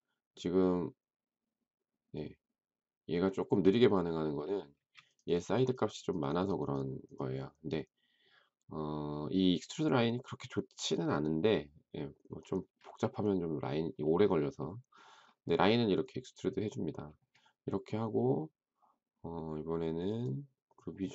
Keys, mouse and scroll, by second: 4.8 space.